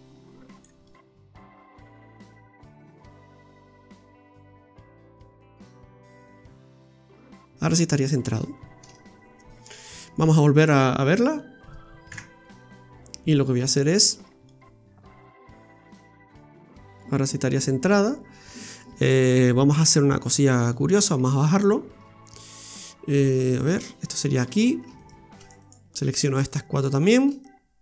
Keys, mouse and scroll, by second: 0.8 middle click, 2.3 click, 3.6 click, 5.2 middle click, 10.6 right click, 11.1 Tab, 12.1 KP_Divide, 12.7-13.3 scroll up 3, 13.6 Tab, 14.2-14.7 scroll down 2, 14.5 middle click, 19.0 right click, 19.8 Tab, 20.1-20.5 scroll up 4, 20.7 middle click, 21.1 Tab, 23.4 right click, 24.3 alt+shift+right click, 24.5 right click, 25.0 right click, 25.4 alt+shift+right click, 25.6 alt+shift+right click, 26.1 shift+right click, 27.2 shift+right click.